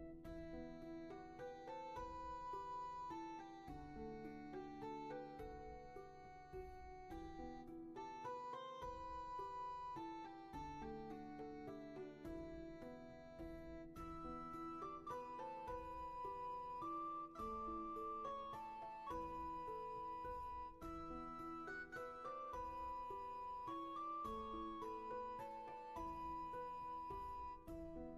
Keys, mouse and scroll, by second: 2.8 ctrl+z, 16.9-17.6 scroll up 1, 18.8-20.3 scroll down 1, 20.7-21.8 scroll up 1, 24.8 ctrl+z.